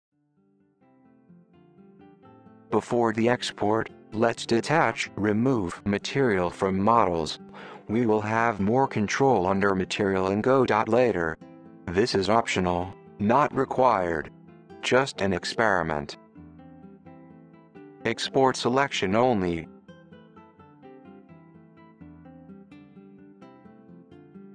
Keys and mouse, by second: 1.3 click, 2.4 click, 4.1 click, 6.7 click, 7.1 click, 7.8 drag, 10.3-12.6 drag.